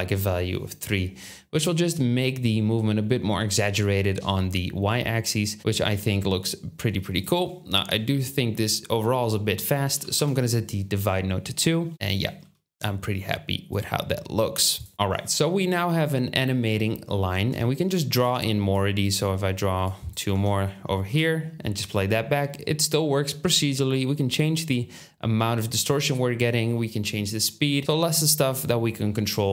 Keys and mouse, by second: 12.4 space, 13.7-14.8 drag, 18.1 Tab, 20.2 Tab, 21.0 space.